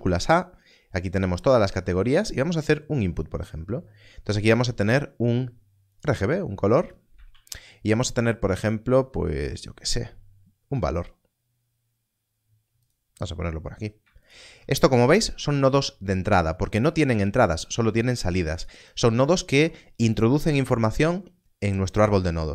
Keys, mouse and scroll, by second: 5.9 shift+a, 10.9 click, 14.2 shift+click, 15.4 alt+a, 18.1 click.